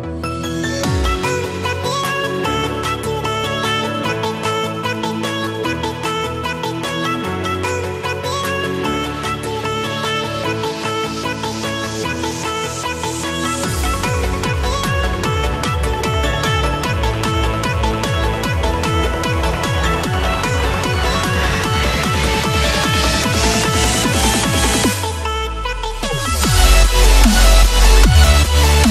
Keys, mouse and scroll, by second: 7.8 click, 12.8 click, 18.9 click, 25.4 click.